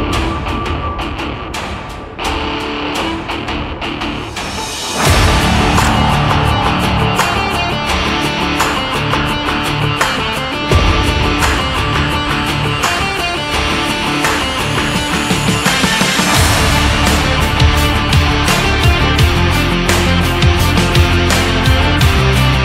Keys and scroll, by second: 13.8 ctrl+s.